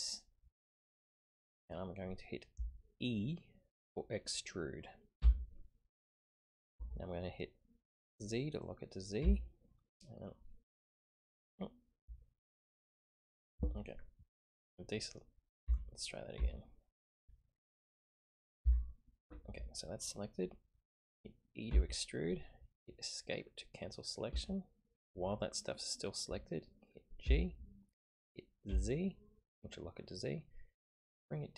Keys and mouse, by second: 5.2 e, 15.6 ctrl+z, 16.3 ctrl+z, 17.7 click, 18.6 g, 21.7 e, 27.2 g.